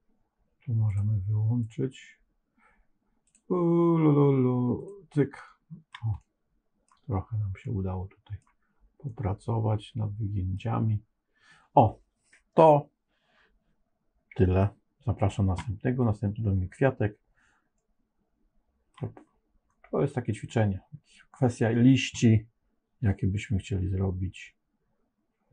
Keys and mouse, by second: 0.9 click, 3.3-5.9 drag, 6.1 middle click, 7.5 middle click, 8.9-10.5 middle drag, 17.7-18.8 middle drag.